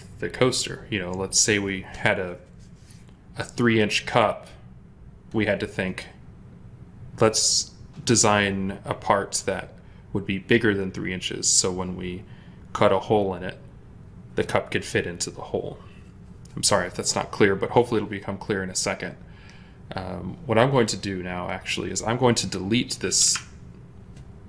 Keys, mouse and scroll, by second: 23.1 Delete.